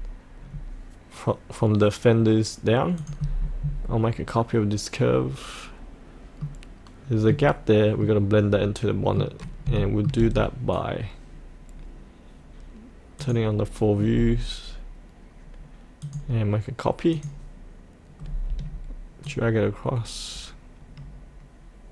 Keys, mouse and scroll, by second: 2.9 click, 6.4-9.7 middle drag, 9.7 shift+middle click, 13.2 click, 18.2-19.2 scroll down 1, 19.2-21.9 drag.